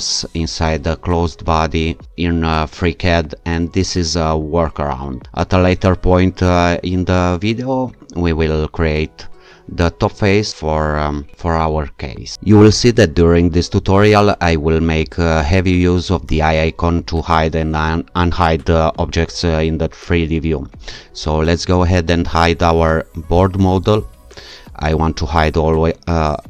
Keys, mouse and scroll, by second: 23.4 click.